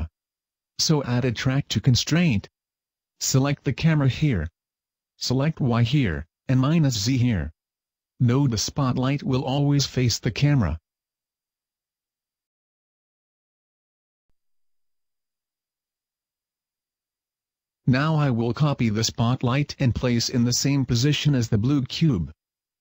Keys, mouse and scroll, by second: 0.1 click, 1.2 click, 3.6 click, 5.7 click, 8.0 click, 9.1 middle click, 9.5 scroll down 2, 10.3 right click, 10.9 middle click, 12.0 g, 14.1 right click, 16.3 KP_0, 17.6 scroll down 1, 19.1 right click, 20.6 right click, 21.2 Tab.